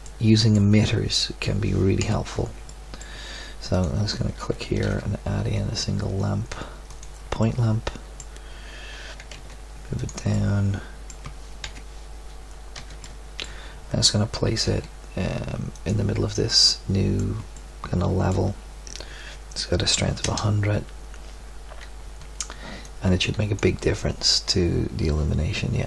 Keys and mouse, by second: 2.0 KP_7, 4.8 shift+a, 9.1 g, 11.6 KP_7, 12.7 z, 13.2-14.6 middle drag, 14.6 g, 16.4 middle drag, 20.2 KP_0.